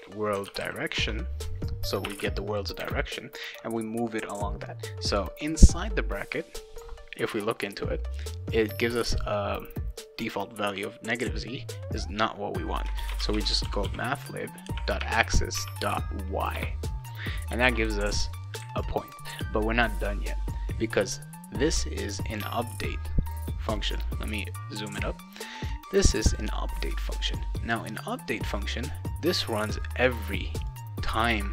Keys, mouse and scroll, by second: 0.0-2.7 typing, 12.9-14.4 typing, 16.5 Return, 17.6 ctrl+s, 22.1 click, 23.7 click, 26.1 click, 26.3 click, 30.1 click, 30.6 click.